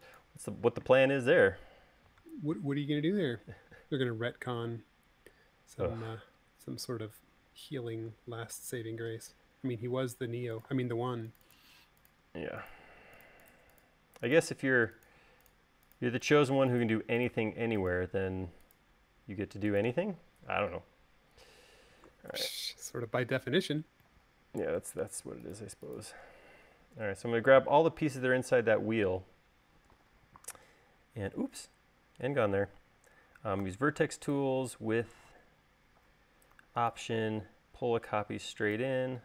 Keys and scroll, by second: 8.8 e, 10.1 space, 33.9 v.